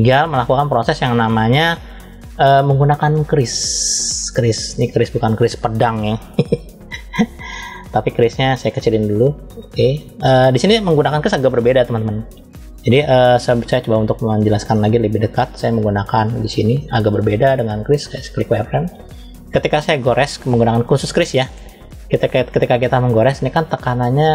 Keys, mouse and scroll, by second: 0.3-0.8 scroll up 1, 3.1 click, 7.8 f, 12.8 shift+middle click, 13.7-14.3 scroll up 1, 14.5 shift+middle click, 16.0-18.3 drag.